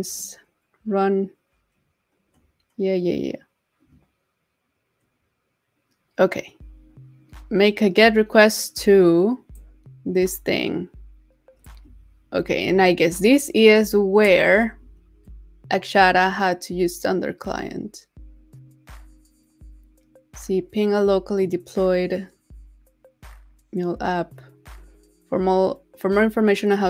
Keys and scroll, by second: 12.3 super+c, 14.3 super+c.